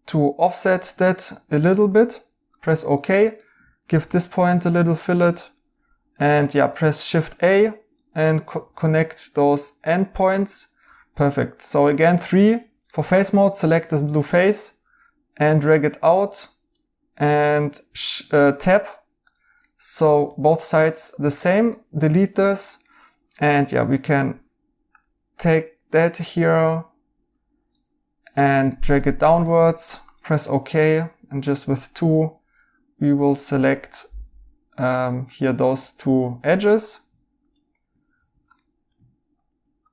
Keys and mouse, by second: 4.0 b, 6.6 shift+a, 7.9 right click, 8.6 shift+a, 9.8 right click, 10.8 3, 11.8 right click, 18.0 Tab, 19.6 right click, 20.2 2, 21.1 2, 21.7 right click, 23.3 right click, 23.6 3, 28.6 right click, 30.4 2, 31.8 right click, 38.1 ctrl+z, 38.5 right click.